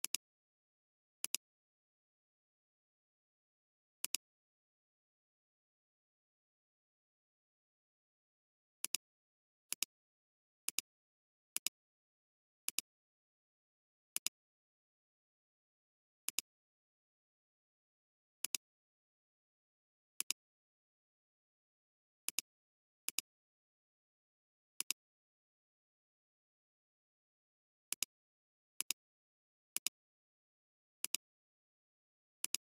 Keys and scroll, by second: 1.3 space, 18.3 alt+space, 18.8 space, 20.1 alt+space, 30.9 space.